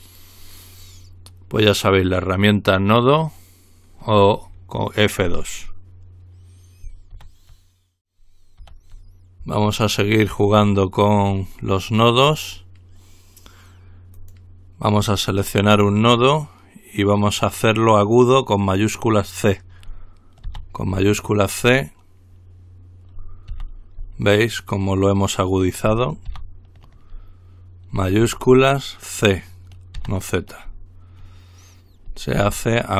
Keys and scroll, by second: 7.4 ctrl+r, 8.9 ctrl+r, 20.7 c, 23.7 ctrl+z, 26.5 z, 30.4 typing, 32.6 typing.